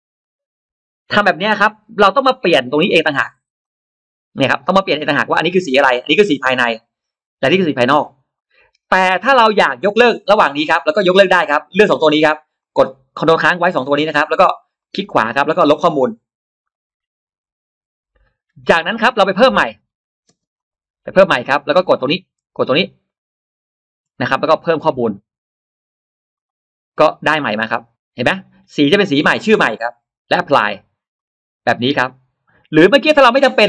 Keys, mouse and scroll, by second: 3.5-4.2 drag, 5.0 click, 7.9 click, 10.4 click, 11.4 ctrl+click, 12.4 click, 13.9 ctrl+click, 14.6 right click, 16.5 click, 19.4 click, 19.6 scroll down 1, 20.2 click, 20.2 space, 20.4 click, 20.8 scroll up 1, 21.0 middle click, 21.9 click, 22.9 shift+click, 24.8 click, 26.2 click, 31.0 click.